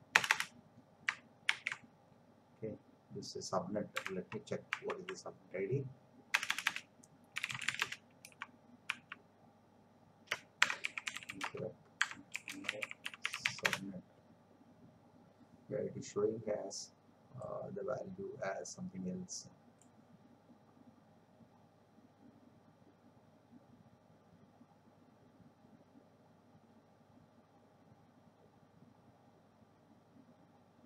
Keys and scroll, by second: 0.1 Return, 1.4 ctrl+v, 4.2 alt+Tab, 6.4 Return, 7.4 c, 7.8 Return, 8.3 Up, 10.6-12.7 typing, 13.6 Return.